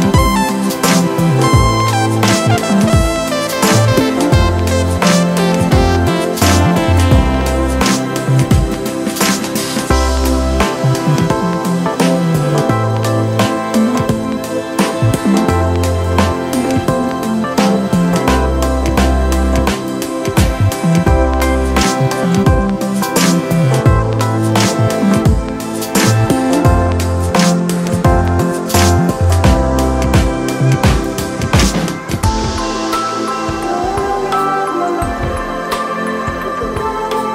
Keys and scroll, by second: 7.6 super+z, 25.5 super+s.